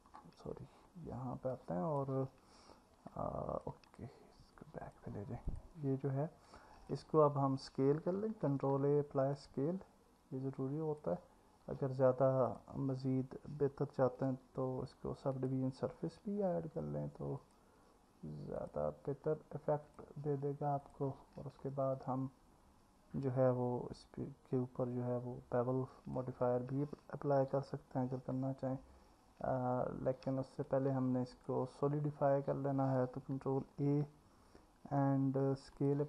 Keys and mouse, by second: 1.5 click, 3.2 alt+middle click, 3.9 click, 5.5 click, 6.5 click, 8.5 ctrl+a, 10.7 click, 12.5-15.5 drag, 17.5 click, 18.6 click, 20.0-20.9 drag, 25.9-31.5 drag, 25.9-31.5 right drag, 33.7 ctrl+a.